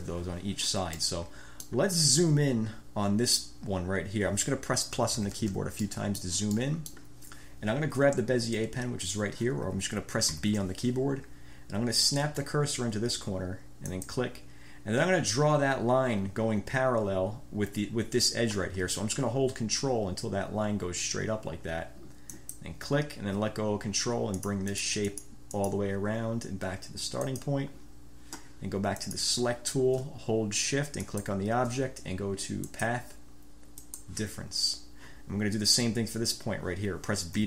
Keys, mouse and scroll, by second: 1.1-2.0 drag, 5.1 =, 6.0 click, 6.1-6.4 scroll up 2, 6.2 click, 6.4 click, 6.7 click, 6.9 scroll up 1, 6.9 click, 10.4 b, 13.9 click, 22.5 ctrl+click, 24.6-25.2 drag, 25.3 click, 25.7 click, 27.3 click, 29.1 click, 31.1 shift+click, 32.9 click, 34.0 click.